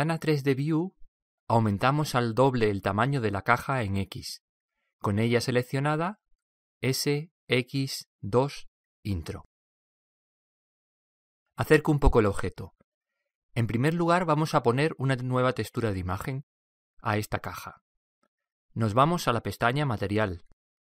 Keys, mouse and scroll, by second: 7.2 s, 13.1-13.8 scroll up 1, 13.8-16.9 middle drag, 20.3 click.